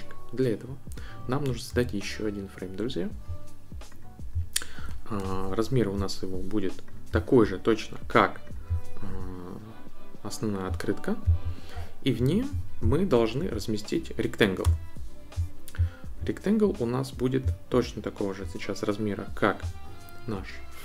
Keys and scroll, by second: 1.7 a, 5.2 BackSpace, 14.7 r.